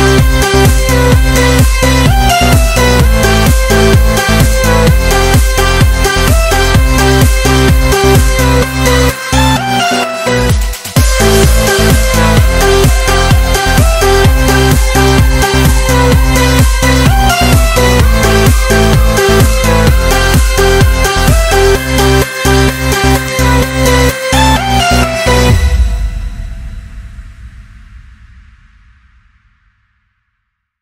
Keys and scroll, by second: 9.2 ctrl+z, 14.2 ctrl++, 16.9 ctrl+-, 17.5 ctrl++, 17.7 ctrl++, 19.6 ctrl+z, 20.7 ctrl+z, 21.3 ctrl+z, 21.7 ctrl+z, 22.5 ctrl+-, 23.5 ctrl++, 25.2 ctrl+z, 26.9 ctrl+z, 27.1 ctrl+z, 28.3 ctrl+z, 29.8 ctrl+z.